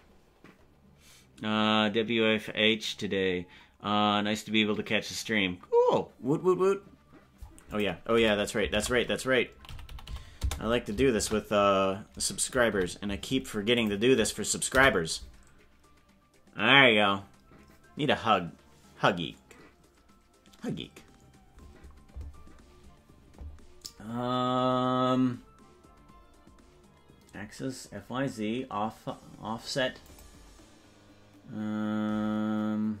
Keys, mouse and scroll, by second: 30.0-33.0 drag.